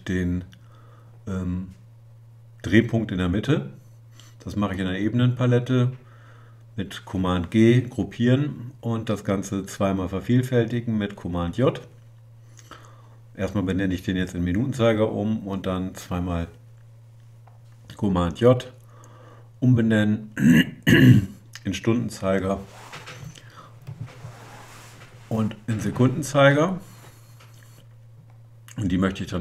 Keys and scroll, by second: 6.6 super+g, 16.9 super+j.